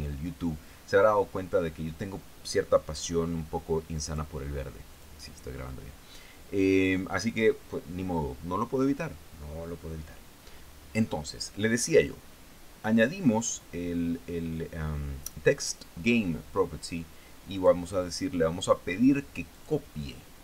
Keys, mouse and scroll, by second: 4.5 click, 5.4 click, 18.0 click, 20.0 click.